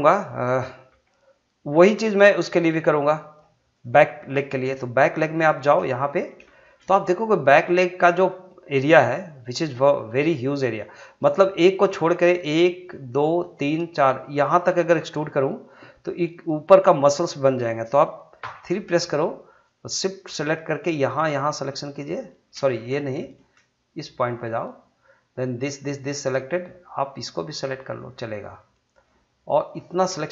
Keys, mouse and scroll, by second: 0.9 g, 1.8 click, 2.8 g, 3.7 click, 4.8 shift+middle click, 18.4 3, 19.9 shift+click, 22.9 ctrl+z, 24.3 shift+click, 25.7 shift+click.